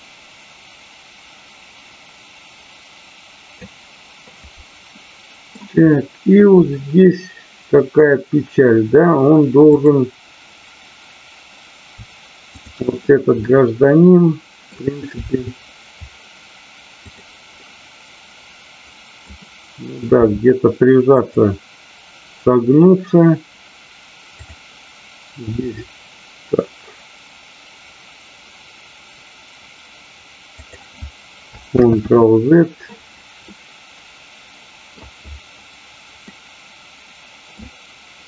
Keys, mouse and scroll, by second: 4.9-5.5 middle drag, 5.9-8.2 middle drag, 12.4 shift+click, 13.4-14.7 middle drag, 15.3 r, 17.0 click, 17.6-19.1 middle drag, 20.2 r, 21.2 click, 30.5 click, 33.4-35.0 middle drag, 36.3-37.6 middle drag.